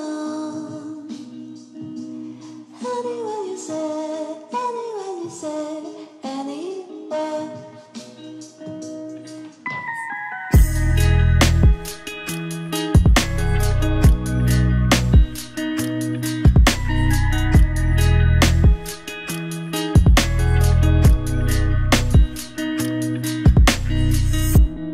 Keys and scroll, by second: 1.7 ctrl+d, 11.7 ctrl+z, 13.0 ctrl+z, 17.0 ctrl+z.